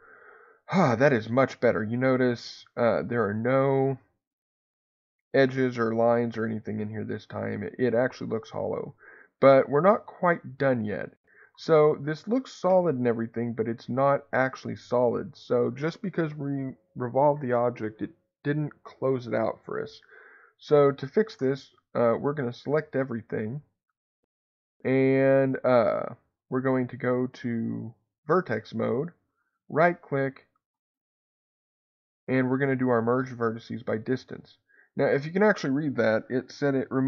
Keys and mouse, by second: 1.3-2.5 middle drag, 5.8-7.3 middle drag, 9.9 click, 10.9 middle click, 26.2 click, 33.6-37.0 right drag.